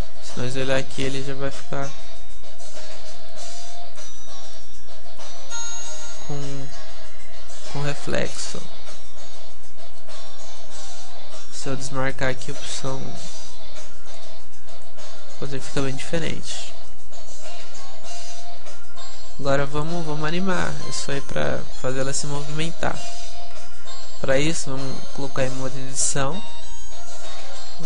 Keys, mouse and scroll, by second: 0.8-2.5 middle drag, 2.8-8.3 middle drag, 14.1-17.9 drag, 17.9-19.4 middle drag, 19.8-22.0 middle drag, 23.0 p, 24.2 Tab, 24.5 Tab.